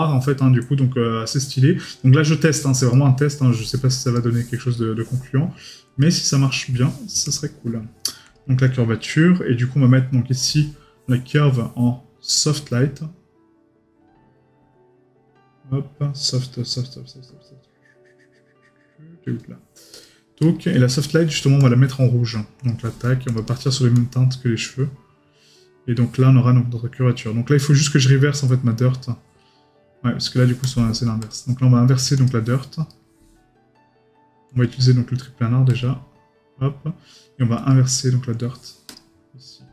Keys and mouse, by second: 2.9 right click, 4.8 right click, 6.5 right click, 11.3 right click, 20.4 right click, 32.9 right click.